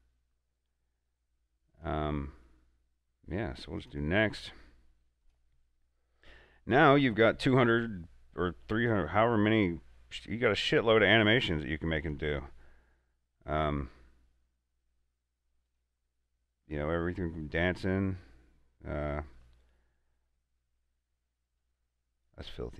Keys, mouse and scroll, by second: 0.5-4.0 drag, 6.8 scroll down 1, 10.1 scroll up 1, 12.3 click, 15.9 click, 21.0 click, 21.0 scroll down 1, 21.8-22.7 drag.